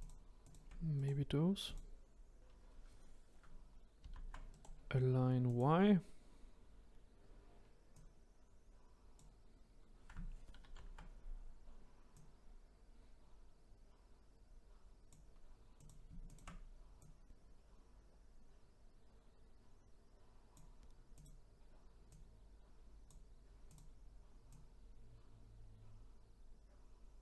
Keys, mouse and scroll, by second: 0.0 shift+click, 0.4 shift+click, 0.9 right click, 4.0 ctrl+z, 4.5-7.5 right drag, 7.9 click, 10.6 ctrl+z, 12.1 click, 15.7 click, 16.2 shift+click, 17.0 click, 21.1 click, 22.0 click, 23.7-24.8 drag.